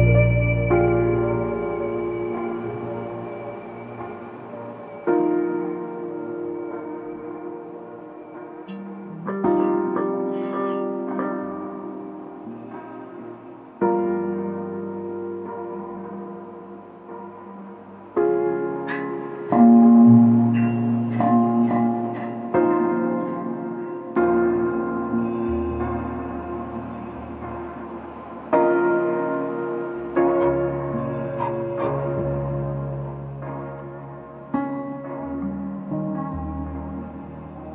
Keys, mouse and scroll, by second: 6.5-8.4 drag, 8.4-9.7 scroll up 7, 9.7-11.3 shift+middle drag, 11.3-12.1 scroll up 2, 12.1-15.1 shift+middle drag, 15.1 click, 18.6 shift+d, 24.3-27.0 shift+middle drag, 27.0-27.5 scroll up 2, 27.5-28.8 shift+middle drag, 28.8 click, 29.8-32.9 drag.